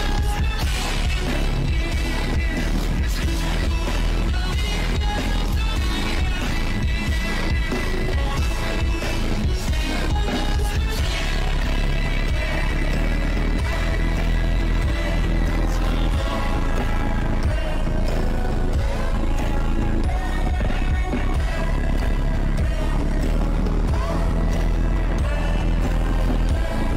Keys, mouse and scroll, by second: 1.1 click, 1.8 click, 2.1 click, 2.3 click, 3.3 click, 6.6 click, 7.1 click, 8.8 click, 9.3 click, 12.6 click, 12.9 click, 13.2 click, 14.2 click, 17.0 click, 17.3 click, 17.8 click, 18.9 ctrl+z, 19.2 click, 20.2 ctrl+z, 20.3 click, 20.5 shift+`, 21.1 click, 21.7 click, 21.8 shift+`, 22.6 click, 23.8 click, 24.1 shift+`, 25.0 click, 26.4 click, 26.7 click, 26.9 click.